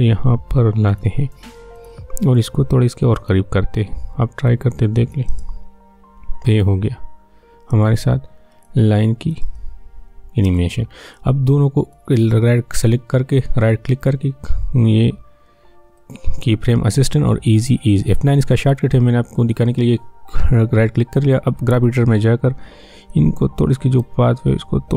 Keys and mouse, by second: 5.3 space, 7.7 space, 8.7 click, 9.4 space, 11.1-13.5 drag, 13.5 right click, 16.0 right click, 21.7-24.9 drag.